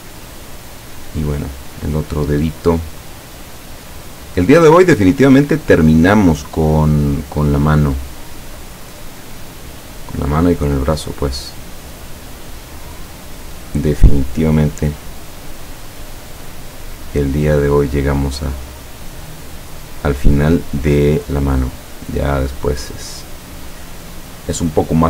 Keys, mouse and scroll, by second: 9.1 click, 10.9 click, 13.3 click, 15.3 click, 16.9 click, 18.4 click, 19.7 click, 21.3 click, 22.6 click, 23.2 click.